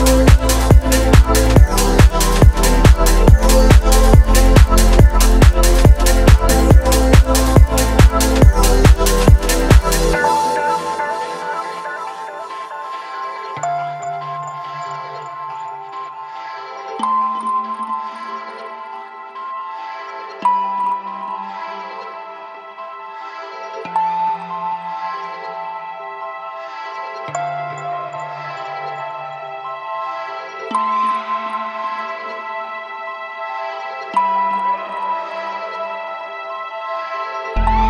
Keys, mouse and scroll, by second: 0.1-0.7 middle drag, 0.7 space, 1.3 click, 1.8 click, 3.3 click, 3.5 space, 6.6 space, 8.7-9.4 scroll down 1, 9.4 click, 10.8 click, 11.2-11.6 scroll down 1, 12.1-12.7 drag, 13.2-13.5 scroll down 1, 15.9 click, 17.5 click, 18.0 click, 19.4 click, 19.8 click, 21.2 click, 21.7 click, 22.9 click, 23.2 click, 23.9 click, 24.3 click, 25.8 click, 26.1 click, 26.3 space, 29.9-30.7 scroll down 1, 30.7 space, 31.7 click, 33.8 click, 34.3-34.8 scroll up 3, 34.8 click, 36.5-37.8 drag.